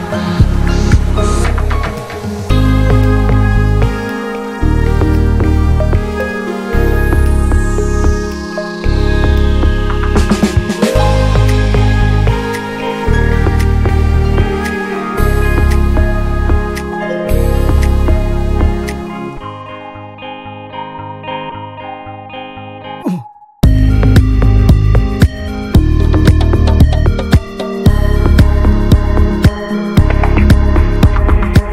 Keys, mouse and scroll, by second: 0.6 right click, 0.8 click, 1.2 shift+r, 1.6-3.6 middle drag, 3.6 click, 3.9 middle click, 4.5 shift+r, 4.7 scroll down 2, 4.8 middle click, 5.8 scroll down 1, 6.2 middle click, 6.5 scroll down 1, 6.7-7.7 middle drag, 7.7 click, 7.9 scroll up 2, 8.2-9.4 middle drag, 9.4 alt+z, 10.2 click, 10.6 alt+z, 11.5 click, 11.8 alt+z, 12.3 click, 12.7 alt+z, 12.9 click, 13.1 middle click, 13.3-15.0 scroll up 5, 13.6 shift+middle click, 15.0 shift+click, 15.5 shift+click, 16.3 shift+r, 16.6 scroll down 1, 16.8 middle click, 17.5 click, 17.7 scroll up 3, 18.0 middle click, 18.9 shift+click, 19.2 shift+click, 19.9 ctrl+z, 20.4 shift+click, 21.2 shift+click, 22.8 right click, 23.0 Tab, 23.1 scroll down 1, 23.3 Tab, 23.5 a, 24.7 right click, 25.6 Tab, 25.9 Tab, 26.2 a, 26.3-26.7 scroll down 3, 26.7 middle click, 27.3-27.7 scroll up 1, 27.7 middle click, 28.6 scroll down 1, 28.8 shift+middle click, 29.4 Tab, 29.6 click, 29.8 ctrl+a, 30.0 Tab, 30.5-31.5 right drag, 31.5 click.